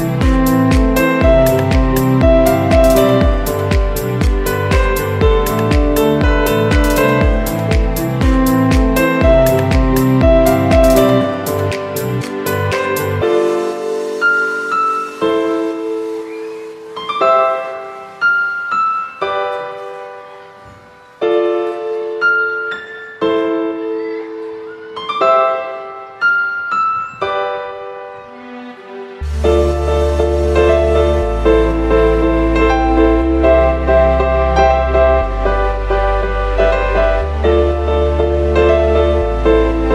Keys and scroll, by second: 0.7 v, 1.3 super+x, 2.2 v, 5.5 z, 11.0 v, 20.9 v, 23.6 v, 24.2 super+x, 30.4 super+x, 34.3 v, 36.9 v, 37.6 super+x, 39.6 super+g.